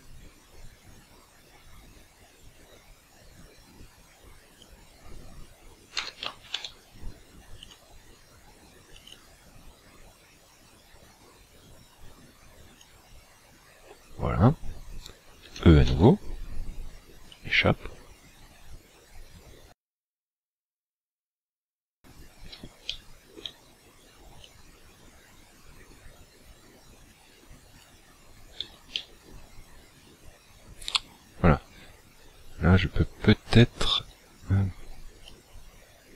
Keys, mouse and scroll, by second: 6.0 s, 7.7 click, 8.9 click, 9.1 click, 15.5 e, 17.4 click, 22.8 shift+middle click, 24.4 click, 28.9 shift+middle click, 33.6 alt+right click, 35.2 click.